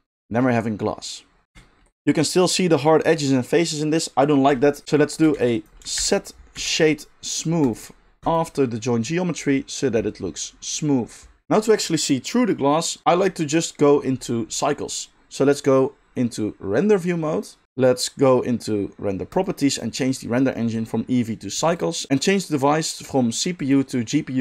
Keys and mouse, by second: 5.3 shift+a, 8.3-16.8 middle drag, 16.8 click, 16.9-19.3 middle drag, 19.3 click, 19.4-20.9 middle drag, 20.9-21.8 drag, 21.8 middle click, 22.1-24.4 drag.